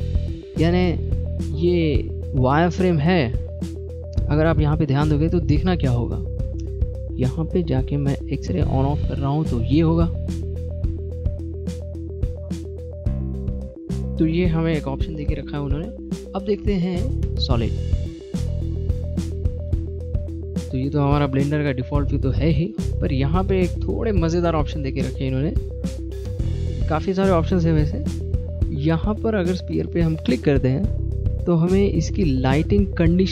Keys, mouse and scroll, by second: 0.8 click, 1.3 middle click, 2.9 shift+middle click, 3.1-3.9 scroll up 4, 4.8 middle click, 4.8 scroll up 1, 5.5 click, 7.4 click, 18.2 click, 18.8-19.7 scroll down 4, 20.4 middle click, 23.8 click.